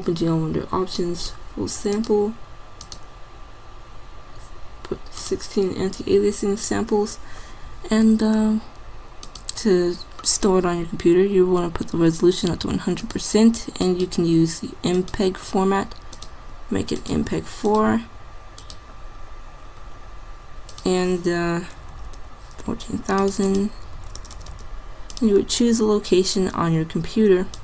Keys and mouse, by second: 1.9-3.7 drag, 11.1-13.1 middle drag, 14.8 middle click, 22.5 KP_0, 24.4 KP_0, 24.6 KP_0.